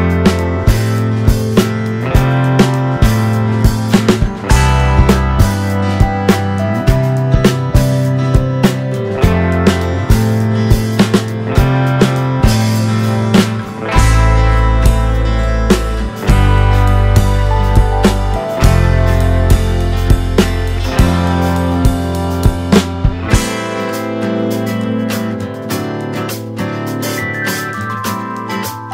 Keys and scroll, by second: 3.7 space, 13.1 space, 16.7 space.